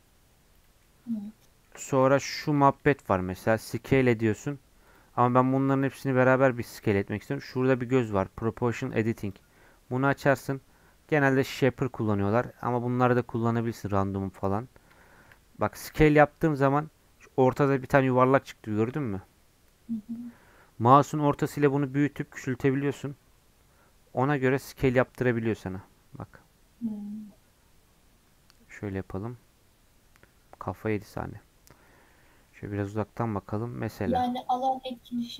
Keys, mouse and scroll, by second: 0.8-1.9 middle drag, 1.9 3, 2.0 click, 2.5 middle click, 3.0 s, 4.8-15.0 drag, 15.0 shift+middle click, 15.8 s, 31.7 scroll down 3, 31.8 middle click, 32.8 s.